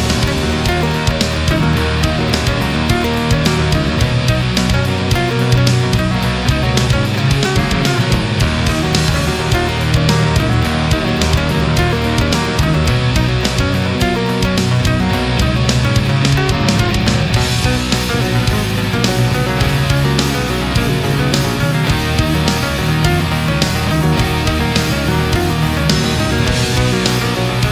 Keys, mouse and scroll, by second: 0.0 shift+right click, 0.5 shift+right click, 1.2-3.1 drag, 3.7 a, 4.0 right click, 4.9 shift+right click, 5.6-6.6 shift+drag, 7.9 click, 8.7 right click, 9.4 shift+right click, 10.2-11.2 shift+drag, 11.4 right click, 11.9-13.6 drag, 13.7 middle click, 14.9 right click, 15.6-16.9 drag, 17.1-20.9 middle drag, 21.2 right click, 21.8-22.9 drag, 23.7 right click, 24.3 shift+right click, 24.9-26.4 shift+drag, 26.7 ctrl+z, 27.4 right click.